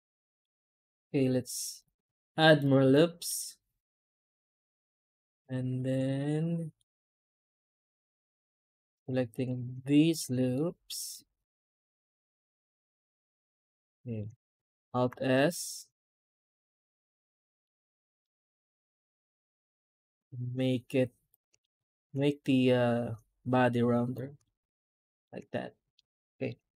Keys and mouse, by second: 2.8 middle click, 4.7 middle click, 6.3 middle click, 6.8 2, 7.2 alt+a, 7.6 alt+shift+click, 7.9 middle click, 8.9 middle click, 10.4 middle click, 12.2 middle click, 13.5 shift+z, 13.7 middle click, 14.0 middle click, 17.5 middle click, 18.1 middle click, 21.5 alt+middle click, 24.3 middle click, 25.2 Tab, 25.8-26.3 middle drag.